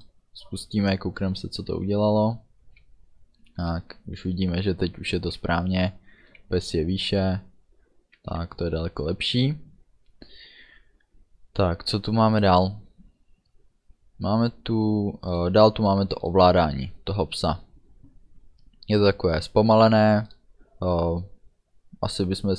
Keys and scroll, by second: 2.9 a, 4.1 d, 5.4 a, 6.6 d, 8.8 a.